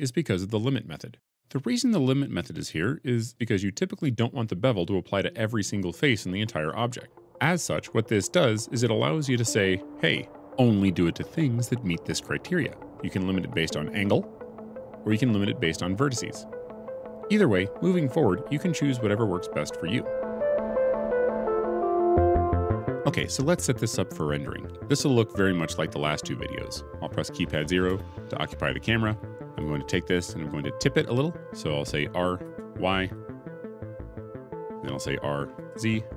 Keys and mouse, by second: 27.8 KP_0, 29.4 click, 32.3 r, 32.9 y, 35.1 r, 35.4 y, 35.4 z.